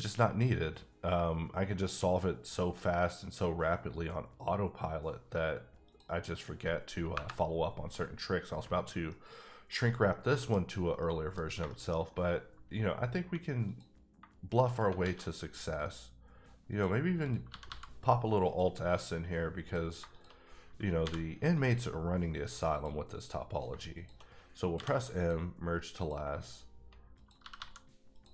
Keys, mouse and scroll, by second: 1.7 click, 5.8 click, 7.1 KP_Enter, 8.9 scroll up 1, 9.1 middle click, 10.1 middle click, 10.6 scroll down 1, 11.0 middle click, 11.5 scroll down 2, 11.6 shift+middle click, 12.1-13.2 scroll up 1, 13.2 1, 13.6 click, 15.0 alt+s, 16.7 click, 17.2 click, 17.5 g, 17.6 g, 18.4 click, 19.6 click, 20.1 shift+click, 21.0 m, 21.5 click, 22.7 click, 24.0 shift+click, 24.7 m, 25.3 click, 26.0 click, 27.4 g, 27.5 g, 28.1 click.